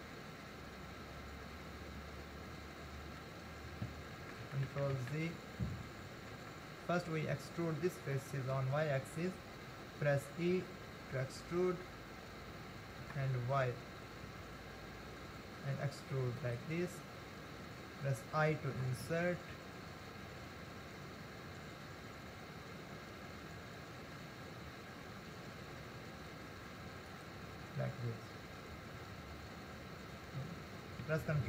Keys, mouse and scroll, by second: 4.3 ctrl+z, 4.6 ctrl+z, 4.8 ctrl+z, 5.2 ctrl+z, 6.0 ctrl+z, 6.5 ctrl+z, 8.2-10.8 middle drag, 10.8 e.